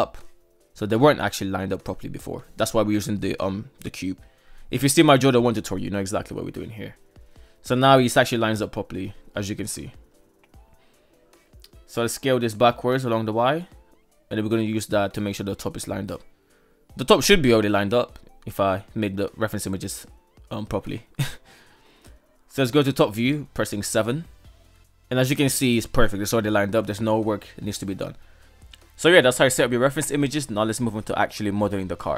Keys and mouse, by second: 7.1 shift+middle drag, 9.0 shift+middle drag, 10.4 shift+middle click, 11.4-12.3 right drag, 12.3 s, 17.4 shift+middle click, 18.6 shift+middle click, 20.0 shift+middle click, 21.5 shift+middle drag, 23.6 KP_7, 24.8-25.5 shift+middle drag, 26.5 shift+middle drag, 27.9 shift+middle drag, 28.9 shift+middle drag.